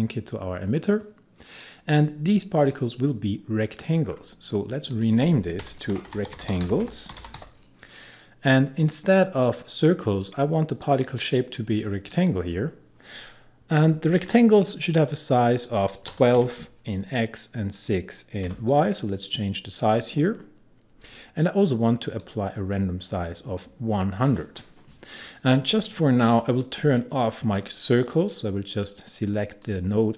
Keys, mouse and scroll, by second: 4.1-4.9 scroll down 1, 4.9 click, 5.6 Return, 5.7-7.9 typing, 8.8 click, 15.3 click, 15.9-16.8 typing, 17.8 click, 18.5 typing, 18.7 click, 22.3-26.1 drag, 26.6 click, 29.6 click.